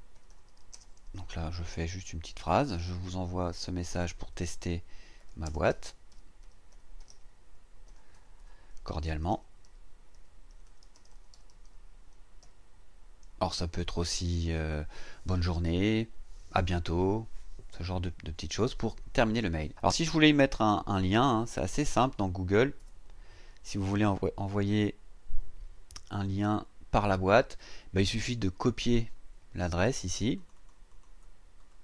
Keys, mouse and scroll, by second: 0.0-7.6 typing, 8.1 shift+Return, 8.8-12.4 typing, 21.6 click, 22.8 Return, 29.7 click, 30.3 click, 31.6 right click.